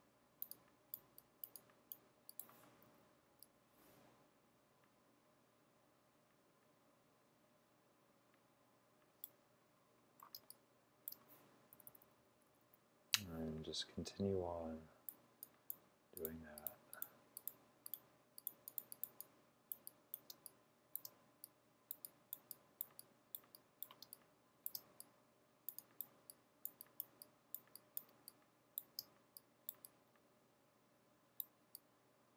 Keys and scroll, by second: 2.9-3.4 typing, 10.4-12.7 typing, 20.4-21.1 typing, 24.6 typing, 28.0-29.0 typing.